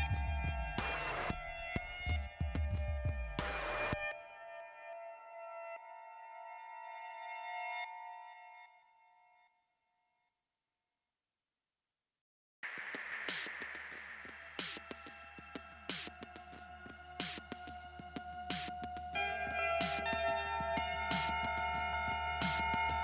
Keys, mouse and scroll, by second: 1.2 click, 4.2-5.3 scroll up 2, 5.8 click, 8.6 click, 10.3 click, 12.3 ', 13.4 click, 14.4 click, 14.5 click, 14.7 click, 14.8 click, 18.7 click, 20.4 click.